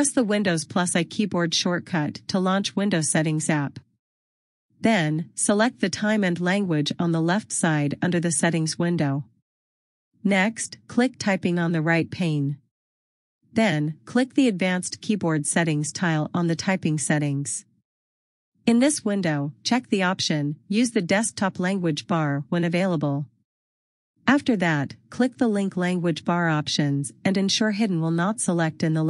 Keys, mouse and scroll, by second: 0.5 click, 2.0 super+l, 4.7 click, 12.5 click, 15.9 click, 28.3 click.